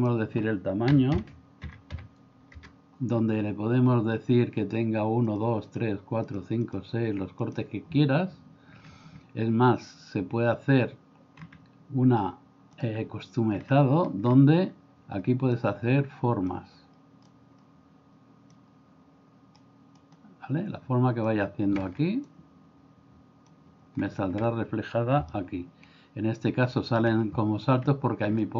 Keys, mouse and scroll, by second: 0.0-2.6 drag, 5.3 click, 5.6 click, 6.3 click, 6.7 click, 7.5 click, 15.6-16.5 drag, 17.3-18.5 drag, 20.0-21.3 drag, 22.2-23.5 drag, 25.3-27.1 middle drag.